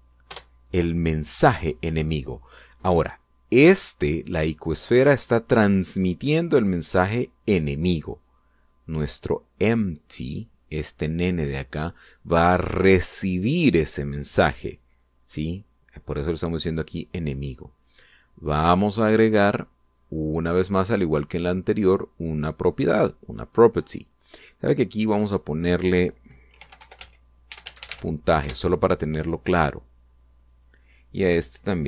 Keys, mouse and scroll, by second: 0.0-0.2 typing, 1.0 Return, 5.1 right click, 10.9 right click, 19.2 click, 22.5 click, 24.2 click, 25.8 click, 27.2-28.6 typing, 29.1 Return, 31.2 click.